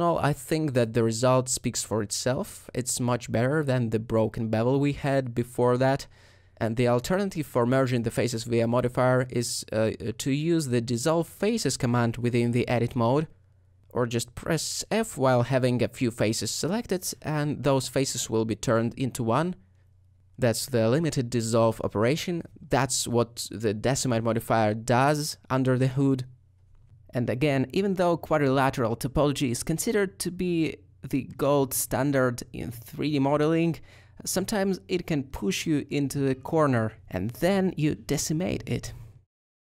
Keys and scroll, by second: 0.0 ;, 1.3 ;, 2.8 alt+Tab, 3.4 Tab, 13.9 ctrl+z, 16.9 shift+f, 20.3 shift+f, 21.4 space.